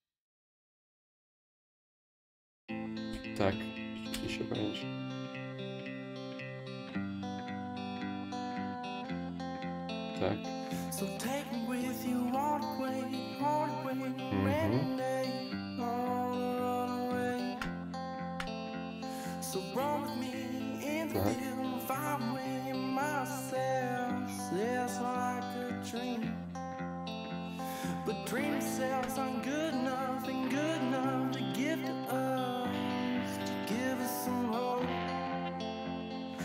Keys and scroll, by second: 0.7 w, 2.3 ctrl+z, 2.7 space.